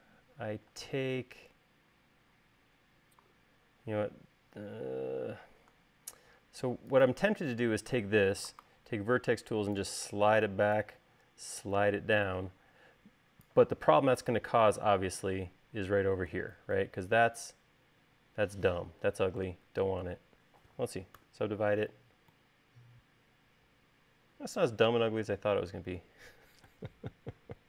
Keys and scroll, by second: 1.3 space, 9.1 v, 21.6 u.